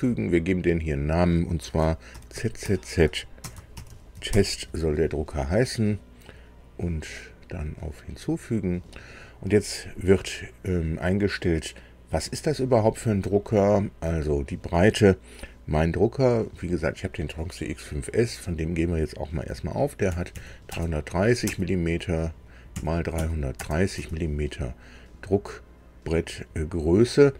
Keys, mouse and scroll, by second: 0.7 click, 2.1-4.3 typing, 7.1 click, 13.7 click, 20.0 KP_3, 20.3 KP_3, 20.7 KP_0, 21.4 Tab, 22.7 KP_3, 23.1 KP_3, 23.6 KP_0, 24.0 Tab.